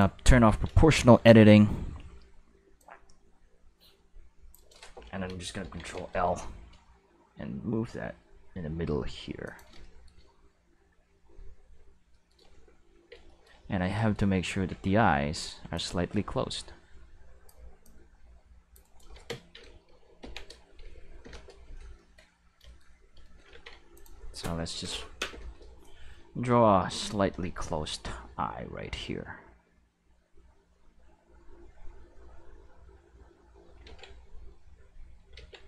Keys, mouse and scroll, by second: 0.3 alt+a, 0.7 c, 2.8-4.5 drag, 5.6 ctrl+l, 6.7 g, 9.5 click, 9.9-12.0 shift+middle drag, 12.2 shift+middle click, 13.0 Tab, 13.6 Tab, 14.7 alt+a, 15.0 c, 15.7-17.5 drag, 17.8-18.7 drag, 18.8 right click, 20.2 ctrl+l, 20.8 x, 21.2 Return, 23.3 middle click, 23.9 click, 26.9-30.0 ctrl+shift+middle drag, 30.0-31.8 drag, 33.9 ctrl+z, 34.6 click, 35.3 ctrl+z.